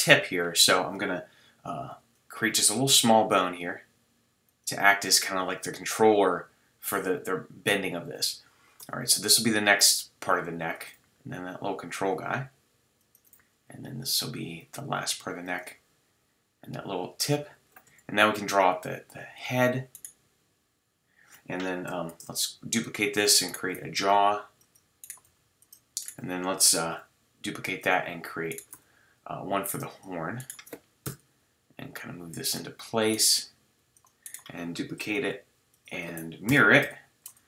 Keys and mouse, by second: 1.9 e, 8.8 e, 10.8-15.8 drag, 11.0 e, 13.4 e, 15.8 e, 17.9 e, 19.9-21.3 drag, 21.4 click, 22.1 shift+d, 23.4 drag, 23.7 g, 25.3 g, 26.8 shift+d, 27.6-28.4 drag, 28.5-30.3 drag, 28.7 g, 30.4-31.8 drag, 31.0 KP_1, 31.8 right drag, 31.8 g, 33.4 g, 35.1 shift+d, 35.7 right click, 36.5 ctrl+m, 37.3-37.4 drag.